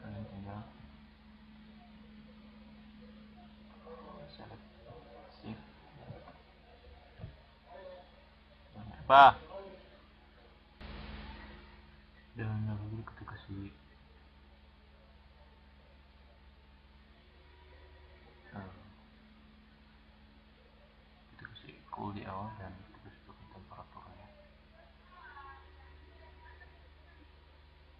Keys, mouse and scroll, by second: 3.5-9.8 drag.